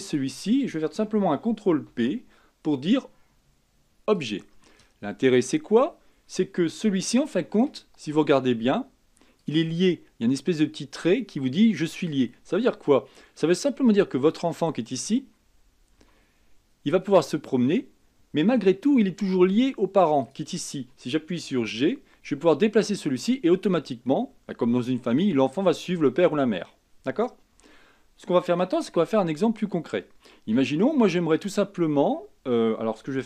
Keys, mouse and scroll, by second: 0.2 shift+click, 2.1 ctrl+p, 5.8-6.6 scroll up 5, 7.2-9.6 shift+middle drag, 9.6 click, 12.3-13.0 scroll down 2, 13.0-13.7 scroll down 2, 13.7-14.5 scroll up 1, 14.5 click, 16.2 g, 20.4 click, 21.8 g, 31.3-32.1 scroll up 4, 32.1-33.2 scroll down 5.